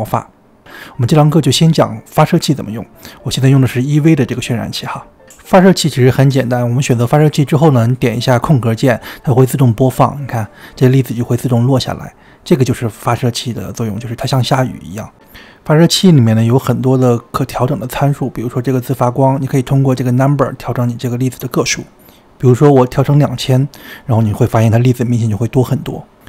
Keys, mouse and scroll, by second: 1.2 click, 2.7 click, 4.5 click, 7.4-7.7 scroll down 2, 8.1-9.3 shift+middle drag, 9.3 space, 15.8-16.1 shift+middle drag, 16.1-17.2 scroll down 2, 21.5 click, 23.8 KP_0, 24.0 KP_0.